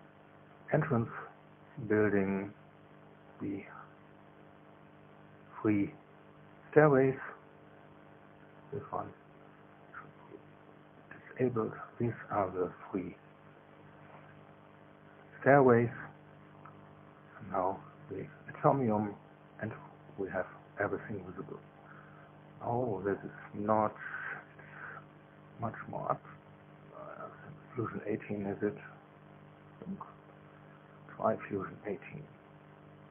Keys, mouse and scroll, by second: 0.7 click, 1.2 space, 4.5 click, 4.9 space, 5.9 click, 6.3 space, 9.7 click, 9.9 space, 11.5 click, 11.8 space, 13.2 middle click, 22.1 click, 22.5 click, 22.6 space, 23.1 click, 23.1 space, 30.5 click, 30.9 space, 31.5 space, 32.9 click.